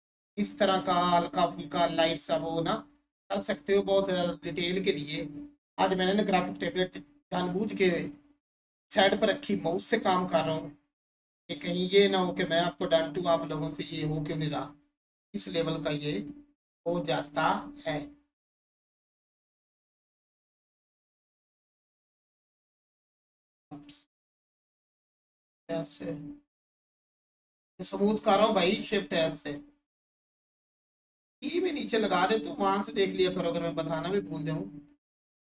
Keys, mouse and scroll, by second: 14.3-14.9 scroll down 1, 15.3-18.9 alt+drag, 21.4 click, 26.1-28.9 drag, 28.9-35.5 alt+drag.